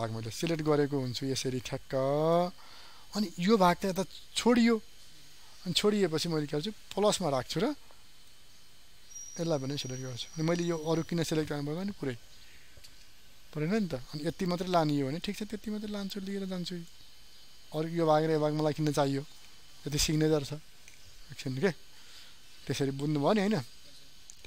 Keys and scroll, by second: 22.1 ctrl+z.